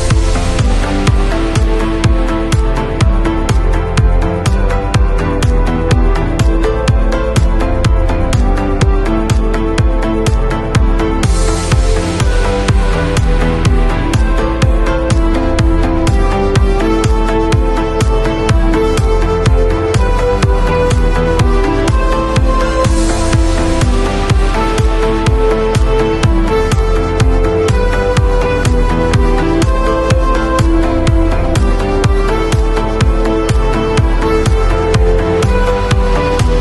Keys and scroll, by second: 0.7 super+[, 3.6 b, 4.3 [, 6.0 ], 10.3 v, 28.0 space.